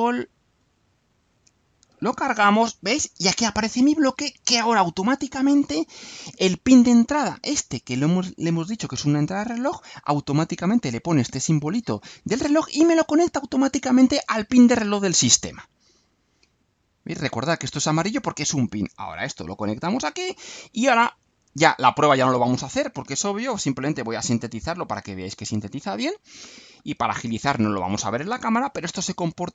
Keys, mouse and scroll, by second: 1.2 click, 4.9 click, 16.4-17.4 drag, 19.1-20.2 drag, 21.4-22.4 drag, 23.0 click, 23.8 ctrl+u.